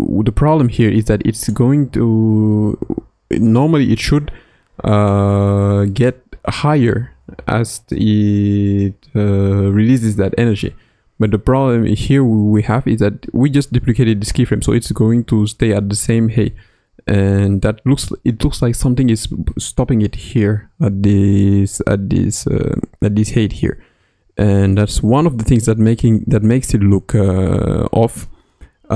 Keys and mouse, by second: 16.3 space.